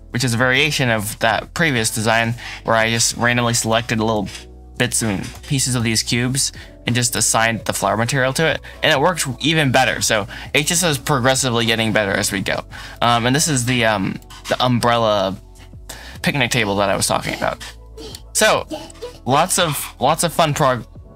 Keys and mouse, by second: 0.4 KP_Decimal, 1.5-1.9 drag, 2.0 Tab, 3.6-5.6 typing, 7.0 drag, 7.9 Tab, 8.3 middle click, 9.8 middle click, 11.7-13.4 middle drag, 16.8 middle click, 17.7-18.2 middle drag, 18.4 shift+middle click, 18.8 middle drag, 19.4 shift+middle drag, 19.8-20.3 middle drag.